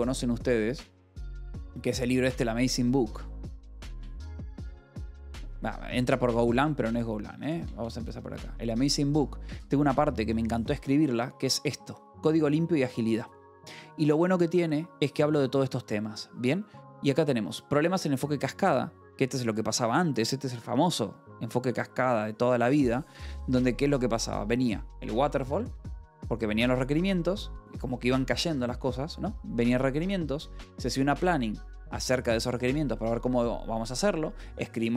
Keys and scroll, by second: 3.0-4.3 typing, 4.9 Return, 7.6 BackSpace, 8.0 Return, 10.3 j, 12.0 f, 12.7 e, 21.5 ctrl+-, 22.2 ctrl+=.